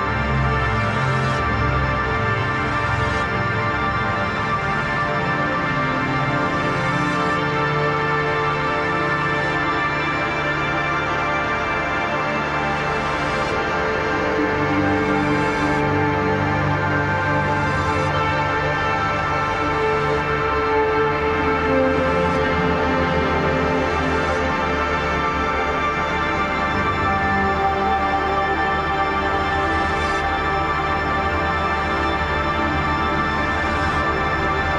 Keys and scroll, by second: 1.0 ctrl+z, 5.3 ctrl+j, 5.5 ctrl+t, 14.1 ctrl+e, 15.0 ctrl+z, 18.4 ctrl+j, 20.4 ctrl+i, 23.1 ctrl+z, 30.5 ctrl+d.